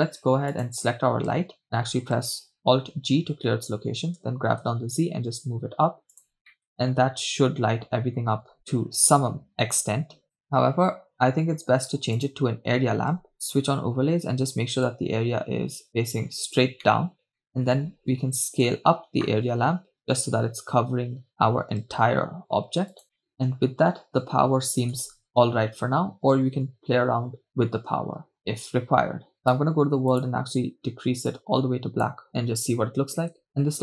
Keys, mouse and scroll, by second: 0.7 click, 2.9 alt+g, 4.6 g, 5.7 z, 6.6 click, 7.2 middle click, 9.2 KP_0, 10.3-12.1 drag, 12.2-13.3 drag, 13.5 KP_0, 13.7 click, 15.0-16.6 drag, 17.0 middle drag, 17.3 click, 19.6 s, 23.0 drag, 24.8 middle click, 25.0 KP_0, 29.4-30.5 drag, 33.3 shift+space.